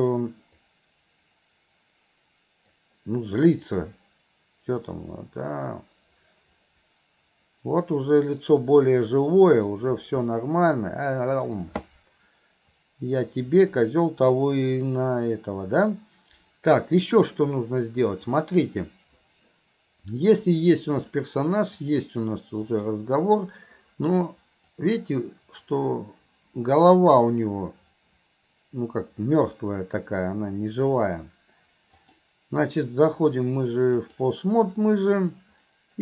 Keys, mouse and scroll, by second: 0.6-2.7 drag, 3.8-11.7 drag, 18.2 click, 20.3 click, 21.8 click, 22.7 click, 24.8-31.1 drag, 32.1-34.3 drag.